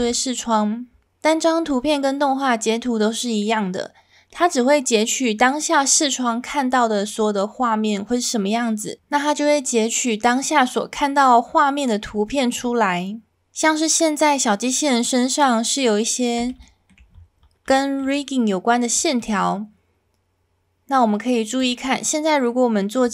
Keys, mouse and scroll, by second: 16.7 shift+middle drag, 17.7 shift+middle drag, 18.5 middle click, 19.2 middle drag, 21.6-23.1 drag.